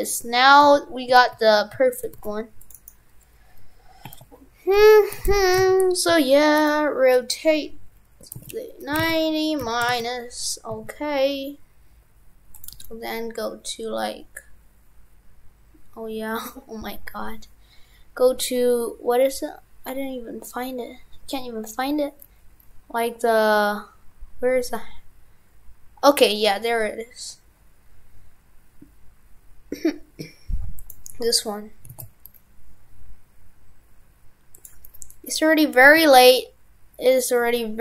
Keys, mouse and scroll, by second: 2.8 right click, 4.1 right click, 5.2 shift+f.